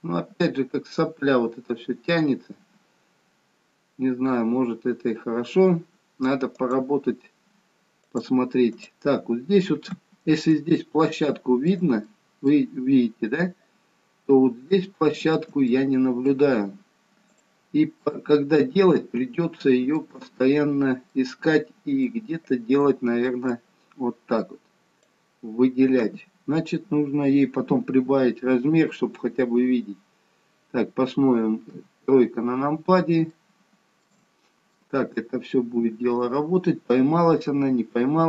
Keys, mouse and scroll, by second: 8.0 click, 8.8 click, 9.3-10.8 scroll up 4, 10.8 shift+middle click, 12.2 middle click, 14.2-14.7 scroll up 4, 14.9 shift+middle click, 15.8 middle click, 18.1 middle click, 20.3-21.0 scroll down 2, 21.0 scroll down 1, 21.1 middle click, 22.8 middle click, 23.5 click, 29.8-30.6 scroll down 1, 30.6-31.0 scroll down 4, 31.8 KP_3, 32.8-33.4 scroll down 2, 33.4 shift+middle click, 34.3-35.9 scroll up 4, 37.3 g.